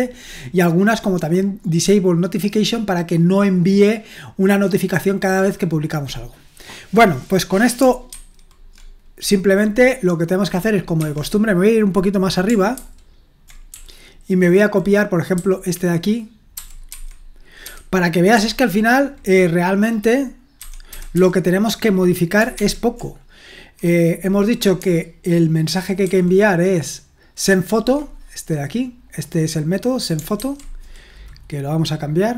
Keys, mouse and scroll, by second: 1.2 click, 1.5 click, 8.1 super+1, 11.0 Escape, 12.7 ctrl+u, 13.7-18.3 typing, 20.3-22.5 typing, 25.6 super+1, 26.0 super+2, 29.0 click, 29.4 click, 29.7 click, 30.4 super+1.